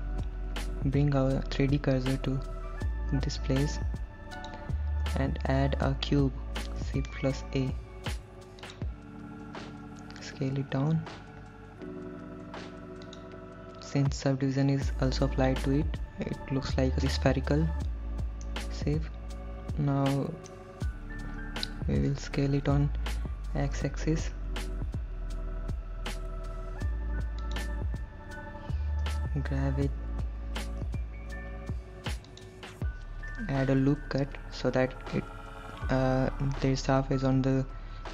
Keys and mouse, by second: 3.4 shift+s, 7.1 shift+a, 11.2 s, 13.3 click, 18.7-20.8 middle drag, 23.0 s, 24.0 x, 27.7 click, 28.3 KP_1, 30.1 g, 32.5 click.